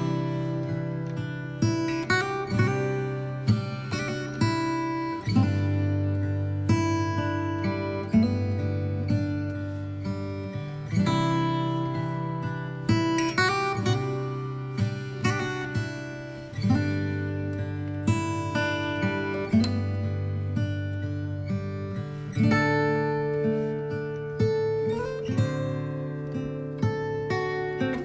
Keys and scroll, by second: 0.0 b, 0.4 x, 3.7 ctrl+j, 10.0 space, 12.8 b, 16.5 space.